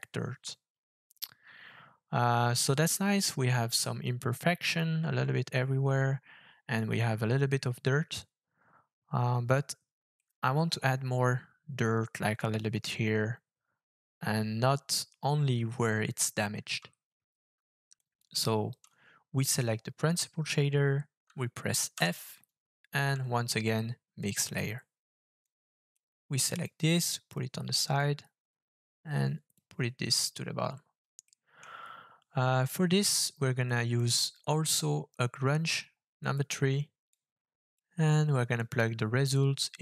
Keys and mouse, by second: 10.2 middle click, 17.9 click, 21.9 f, 25.4-26.0 drag, 26.6 click, 28.0-29.5 drag, 31.2 middle click, 33.8-36.3 drag, 37.1 click, 38.6-39.8 drag.